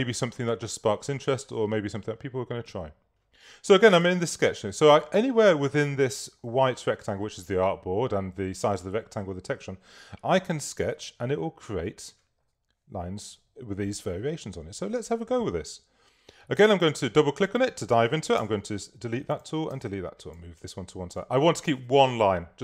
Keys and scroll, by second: 4.1 super+-, 19.7 BackSpace.